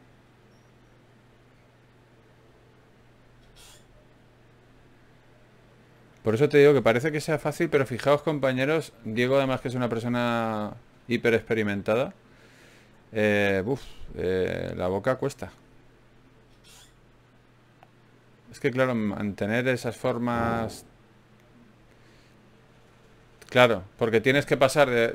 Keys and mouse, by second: 2.9 ctrl+shift+b, 6.7 g, 8.3 s, 9.1 g, 9.9-14.4 drag, 12.5 g, 15.1 k, 15.9 g, 18.1-20.0 drag, 19.0 g, 20.6-24.4 drag, 20.6 g, 22.3 g, 24.4 KP_Divide.